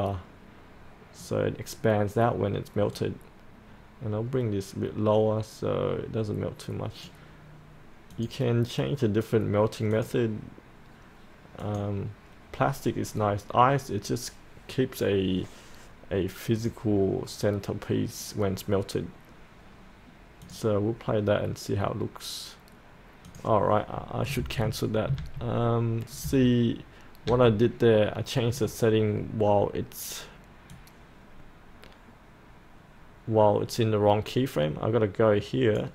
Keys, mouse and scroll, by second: 4.8-7.8 drag, 24.4 ctrl+z, 25.2 ctrl+z, 26.2 z, 30.7-35.9 drag.